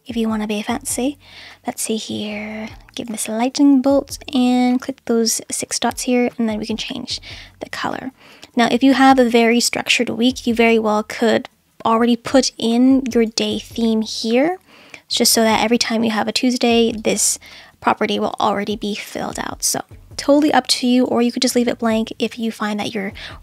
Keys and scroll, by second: 5.4 Caps_Lock.